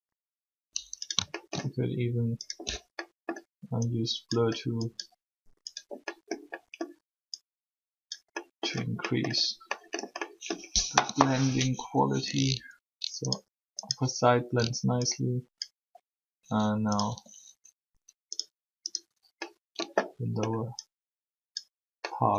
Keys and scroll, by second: 11.0 3, 16.9 r.